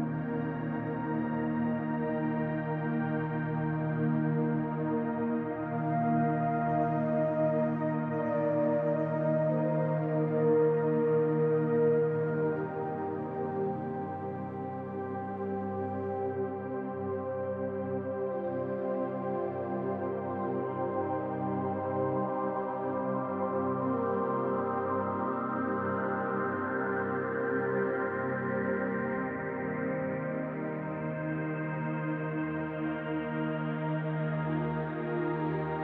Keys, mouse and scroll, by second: 0.8-1.4 scroll down 5, 1.4 middle click, 3.3 s, 5.4-6.3 scroll up 4, 7.2 Tab, 8.5 e, 9.9 click, 12.4 click, 22.1 alt+click, 23.2 s, 25.0 middle click, 25.6 shift+middle click, 27.0 middle click, 27.6 shift+middle click, 28.9 s, 30.2 middle click, 30.7 shift+middle click, 31.9 alt+click, 33.4 e, 34.6 click.